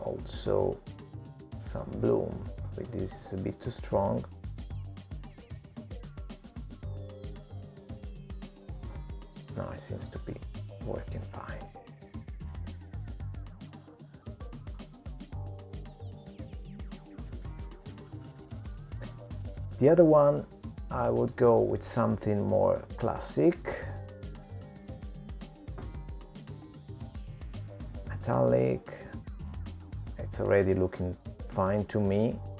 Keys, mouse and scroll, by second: 5.8 click, 6.4 click, 9.8 click, 12.4 middle click, 16.5-17.5 scroll down 7, 17.5 middle click, 18.4-19.1 scroll up 3, 19.1-20.0 scroll up 4, 20.0 middle click, 22.4 click, 27.0 click, 28.3 click, 32.2 click.